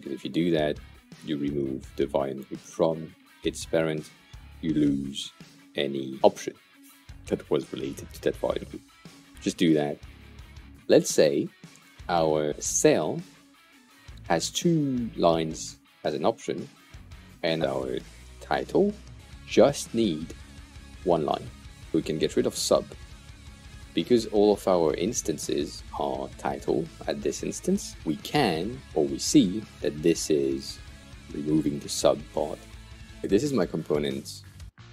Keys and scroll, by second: 17.9-19.1 typing, 22.6 Delete, 34.4-34.9 typing.